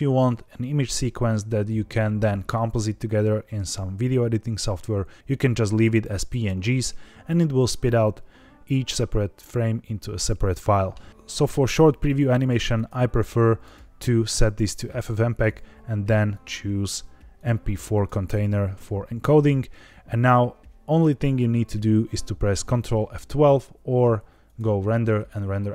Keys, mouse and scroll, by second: 11.1 click, 12.3 click, 12.7-13.7 drag, 14.1-15.4 scroll down 3, 15.4 click, 15.6 scroll down 3, 16.2-16.5 drag, 17.3-18.0 drag, 24.4-25.7 drag.